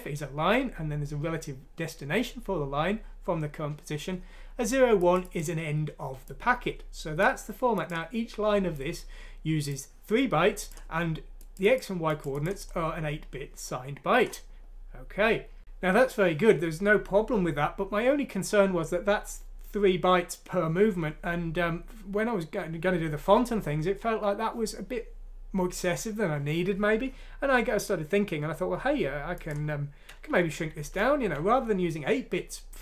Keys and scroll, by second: 30.3 Page_Up, 30.7 Page_Up, 31.0 Page_Up.